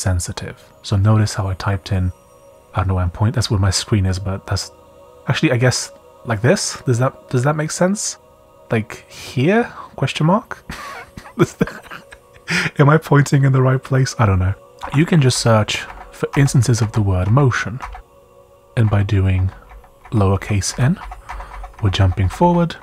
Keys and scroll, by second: 9.1 typing, 11.6 typing, 14.5-17.8 typing.